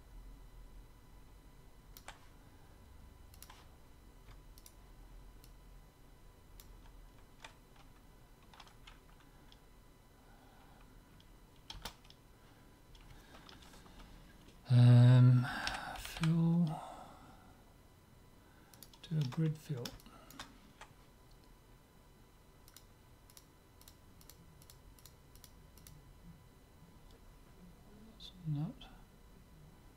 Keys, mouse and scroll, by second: 3.4-5.1 drag, 4.6 right click, 5.5-7.2 middle drag, 11.8 space, 16.2 l, 20.0-21.9 middle drag, 22.9-26.2 drag, 27.5 click.